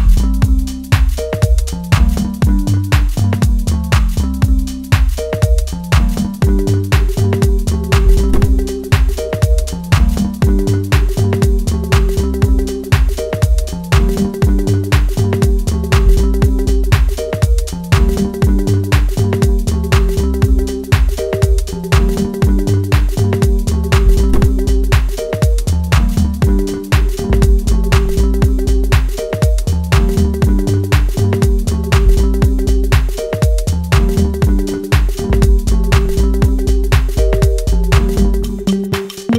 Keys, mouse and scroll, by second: 0.0-0.7 scroll up 4, 0.7 scroll down 6, 1.0 scroll up 1, 1.1 middle click, 3.7-4.0 scroll up 4, 4.5-6.4 scroll up 1, 6.6 shift+middle click, 7.4 shift+z, 7.9 scroll down 1, 8.8 middle click, 9.9-10.4 scroll up 2, 10.7 click, 12.6 click, 15.5 click, 17.7 right click, 23.5 click, 23.8 click, 25.7 right click, 28.9-29.7 scroll down 5, 29.7-30.2 scroll up 1, 30.6 ctrl+r, 33.7-35.6 scroll down 3, 34.0 middle click, 35.8 shift+z, 36.4 middle click, 38.8 ctrl+r.